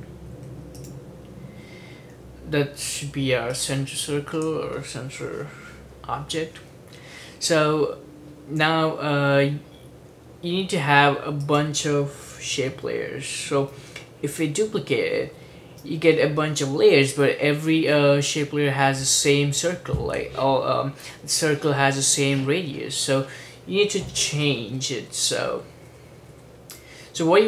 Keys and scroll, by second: 0.0-0.6 typing, 14.5 super+d, 14.9 super+d, 15.1 super+d, 15.5 super+d, 15.6 super+d, 24.8 super+z, 25.2 super+z, 25.6 super+z, 26.1 super+z, 26.4 super+z.